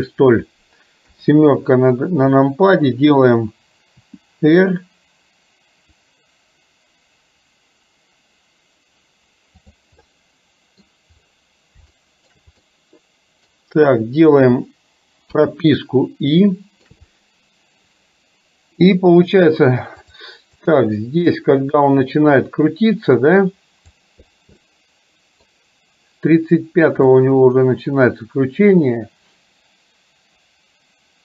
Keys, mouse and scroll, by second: 1.2 KP_7, 4.1 r, 10.2 middle click, 12.1 shift+middle click, 12.7-15.4 middle drag, 16.6 shift+middle click, 20.2 click, 20.8-24.1 drag, 24.7 middle click, 27.3-31.2 drag.